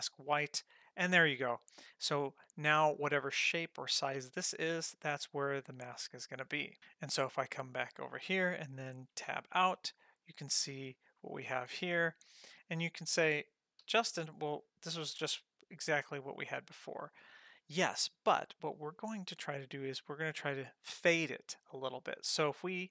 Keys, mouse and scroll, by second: 7.4 click, 9.3 Tab, 13.8 g, 19.0 click, 19.8 Tab.